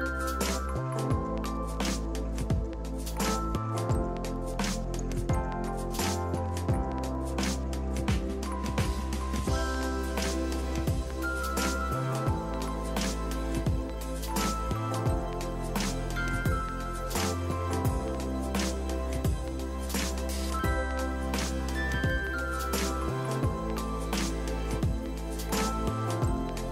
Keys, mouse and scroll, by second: 2.7 click, 4.2 click, 6.3 click, 7.8 space, 8.8 click, 9.6 space, 11.8 click, 13.0 click, 13.1 z, 13.2 click, 13.5 click, 13.7 click, 13.9 click, 14.1 click, 14.3 click, 14.5 click, 14.7 click, 15.6 click, 18.4 click, 25.8 click.